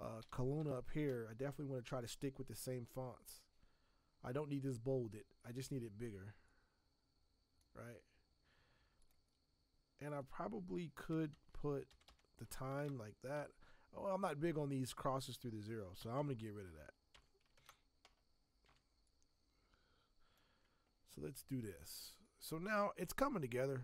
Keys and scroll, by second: 0.0-1.0 typing, 11.3 shift+;, 11.9 0, 12.1 0, 12.8 ctrl+Return, 17.1 BackSpace, 17.6 ctrl+Return, 18.7 v.